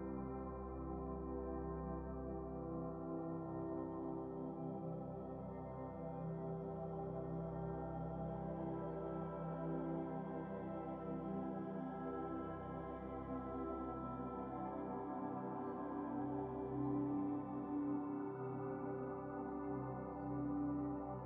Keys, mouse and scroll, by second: 0.1 scroll down 2, 0.4-1.6 middle drag, 1.6 click, 2.2 x, 3.3 shift+a, 14.4-15.4 drag, 15.4 shift+a.